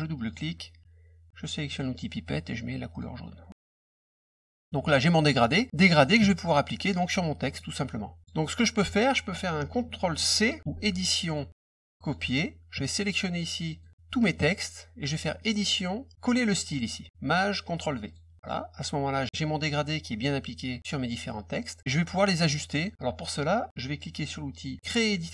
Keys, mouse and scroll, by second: 0.1 click, 0.3 click, 1.7 click, 2.9 click, 3.5 click, 4.7 middle click, 5.4 click, 6.6 middle click, 7.4 click, 8.2 click, 11.2 click, 12.0 click, 12.9 click, 15.4 click, 18.0 click, 18.4 click, 22.8 middle click, 25.1 click.